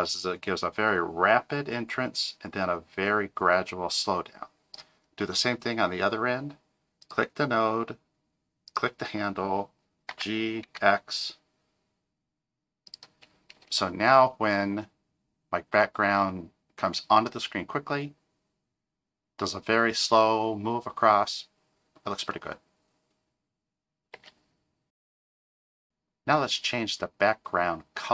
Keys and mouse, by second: 7.0 click, 8.7 click, 10.1 g, 13.5 space, 24.1 space.